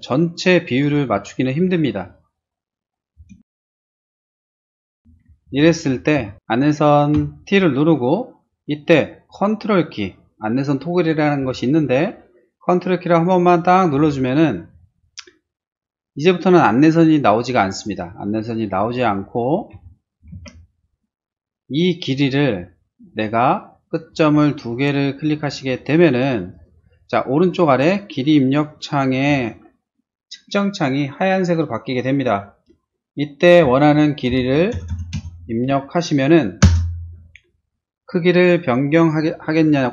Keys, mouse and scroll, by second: 3.1 space, 4.5 ctrl+e, 4.8 click, 5.3 space, 5.6 click, 7.1 t, 17.6 click, 18.9 space, 19.7 t, 23.9 click, 26.5 click, 34.0-35.4 typing, 36.6 Return.